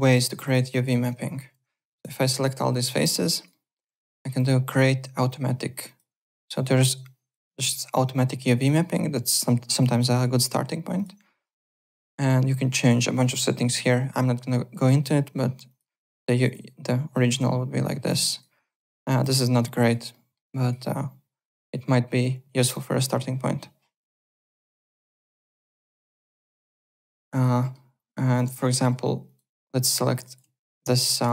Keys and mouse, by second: 0.0-2.0 typing, 0.4 click, 0.9 ctrl+e, 2.2 alt+middle click, 2.3 alt+right click, 2.8 alt+middle click, 3.1 alt+right click, 3.5 alt+middle click, 4.3 click, 5.8 click, 7.0 click, 8.1 click, 9.8 click, 10.9 click, 12.8 click, 15.6 click, 16.4 click, 17.3 z, 18.2 alt+right click, 19.3 alt+middle click, 19.6 alt+right click, 20.1 alt+middle click, 20.5 alt+right click, 20.8 alt+click, 22.2 alt+Tab, 22.7 alt+click, 26.6 alt+Tab, 27.1 alt+click, 27.6 alt+middle click, 27.9 alt+click, 28.2-29.1 typing, 29.2 click, 29.6 Tab, 30.1 click, 30.2 click, 30.9 alt+click.